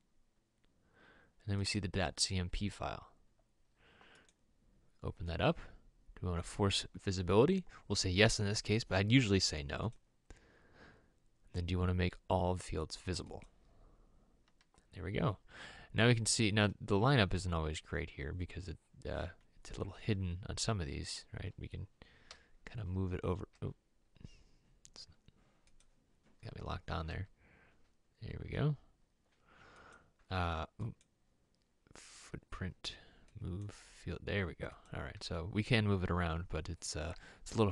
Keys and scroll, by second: 22.5 m, 23.7 m, 27.2 m, 32.3 m.